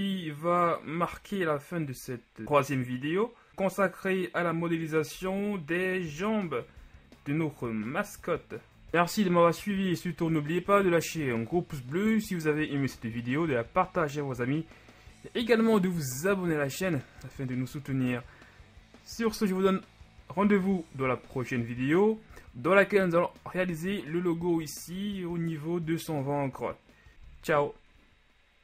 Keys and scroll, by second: 2.1 shift+Tab, 2.4 shift+Tab, 3.5 g, 5.4 KP_1, 6.3 Tab, 7.0 a.